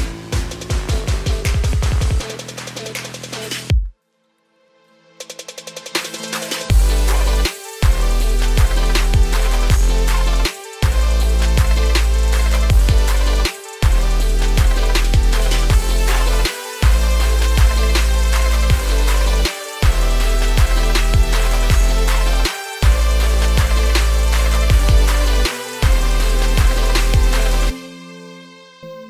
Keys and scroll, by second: 7.2 ctrl+a, 17.6 ctrl+a, 25.6 ctrl+a.